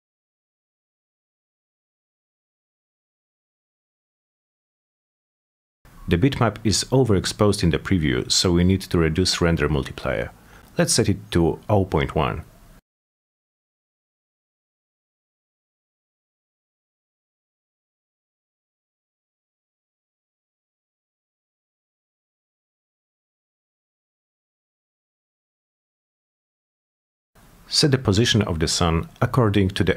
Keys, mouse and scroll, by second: 1.7 click, 2.5 f, 3.7 p, 8.1 m, 9.5 click, 10.1 click, 11.2-11.5 drag, 12.1 click, 13.0-14.5 typing, 18.8 click, 19.8-21.2 alt+middle drag, 22.2 click, 23.0 alt+middle click, 23.9-25.0 middle drag, 25.6 click, 26.5-27.9 middle drag.